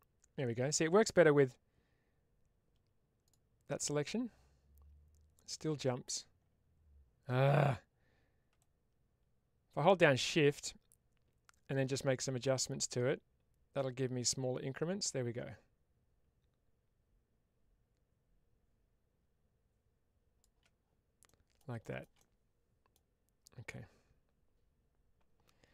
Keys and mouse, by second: 8.5-20.5 shift+drag, 21.1 middle click.